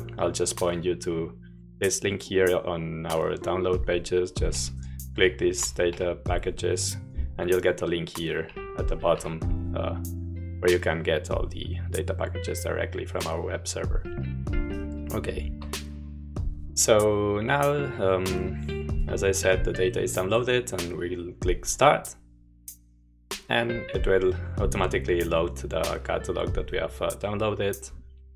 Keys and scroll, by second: 4.9-5.9 typing, 8.8-9.1 typing, 15.2 super+4.